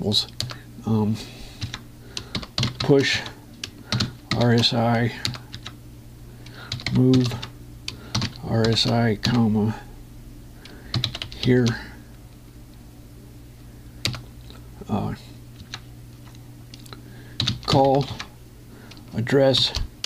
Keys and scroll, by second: 1.3 Return, 2.3 Tab, 3.1 shift+p, 3.9 Tab, 4.7 shift+~, 5.9 Return, 6.3 Tab, 8.1 Tab, 14.8 Return, 16.3 Tab, 18.8 Tab.